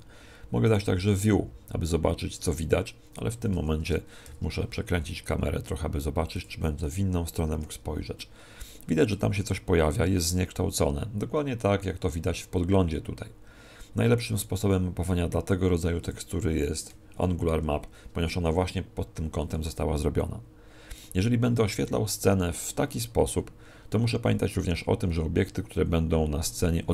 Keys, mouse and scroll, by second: 3.2 Escape, 4.2 shift+f, 6.4 click.